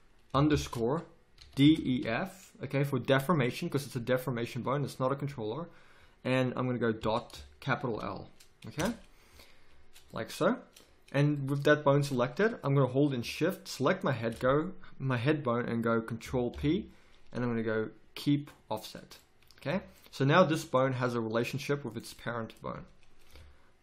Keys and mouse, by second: 10.1-11.6 middle drag, 16.5 ctrl+p, 19.7 z, 23.3 KP_1.